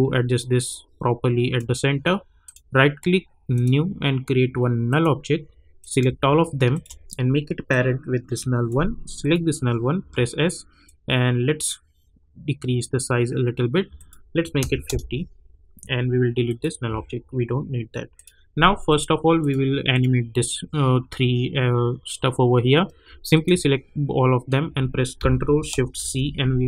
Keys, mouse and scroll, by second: 2.4 right click, 2.4 right click, 3.5 click, 6.7 shift+click, 7.7-9.2 drag, 10.0 s, 10.8-13.9 drag, 14.8 Return, 16.4 click, 23.3 shift+click, 26.0 ctrl+shift+c.